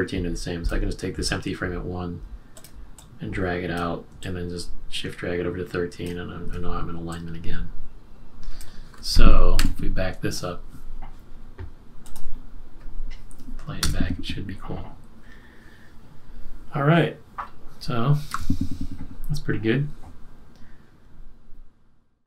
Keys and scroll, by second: 9.6 super+-, 13.8 Return, 18.3 super+-.